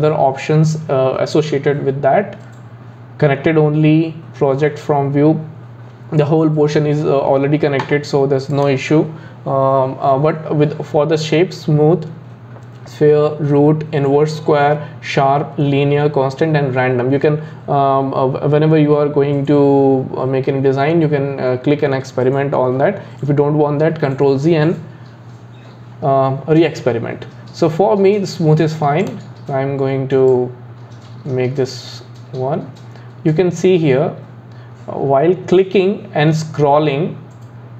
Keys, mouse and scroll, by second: 8.5-11.7 drag, 30.3 click.